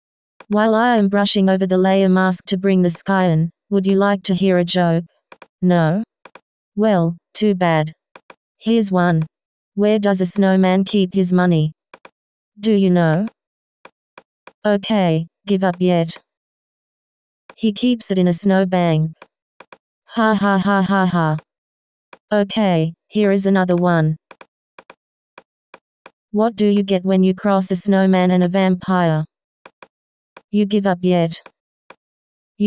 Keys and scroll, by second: 2.9 ., 26.0 ctrl+alt+-.